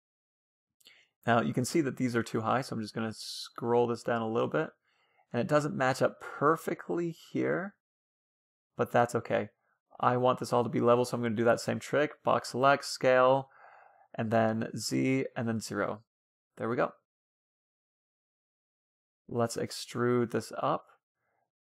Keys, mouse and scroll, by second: 0.3 c, 0.9 b, 2.9 g, 4.4-7.1 middle drag, 6.1-7.7 right drag, 6.4 g, 8.1-9.8 right drag, 8.2 g, 9.8-11.9 middle drag, 10.4 a, 10.6 b, 12.0 s, 15.0-17.3 middle drag, 17.5-19.1 middle drag.